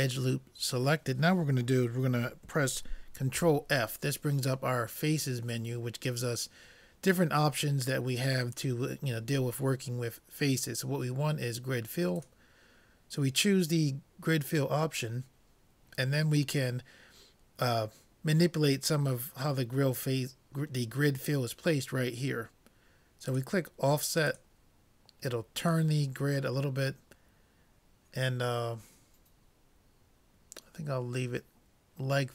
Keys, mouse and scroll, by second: 3.4 ctrl+f, 23.3-26.5 drag.